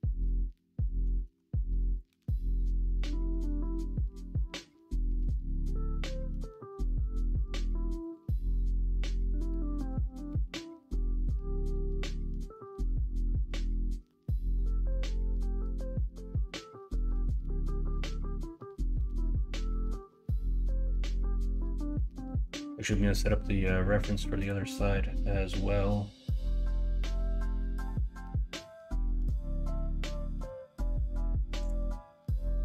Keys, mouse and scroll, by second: 1.2 alt+z, 3.3 Tab, 5.3 shift+middle click, 32.4 middle click.